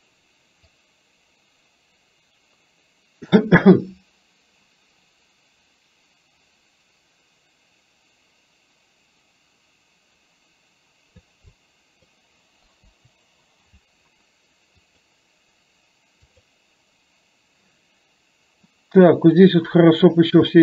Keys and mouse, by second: 0.8-11.3 drag, 11.5 click, 12.9 Delete, 14.9 click, 16.4 click, 20.5 shift+middle click.